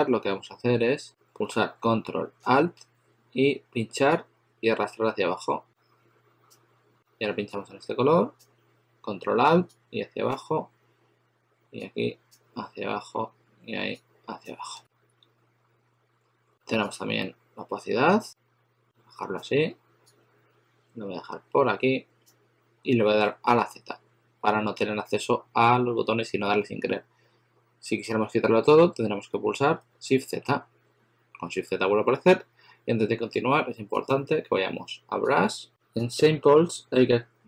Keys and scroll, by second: 23.4 z, 29.8 shift+z, 31.6 shift+z.